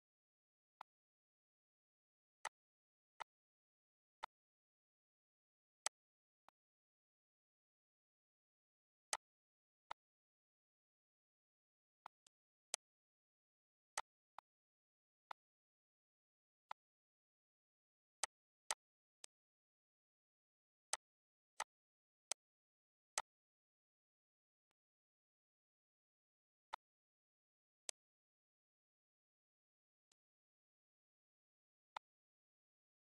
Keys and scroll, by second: 0.4 Delete, 8.1 ctrl+s, 15.0 ctrl+s, 22.8 ctrl+s.